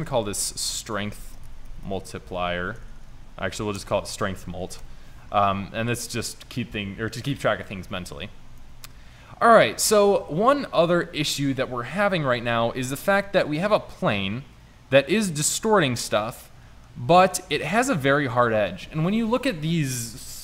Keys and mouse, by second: 3.0 BackSpace, 4.8 BackSpace, 5.3 n, 13.7-15.0 middle drag, 15.5 middle click.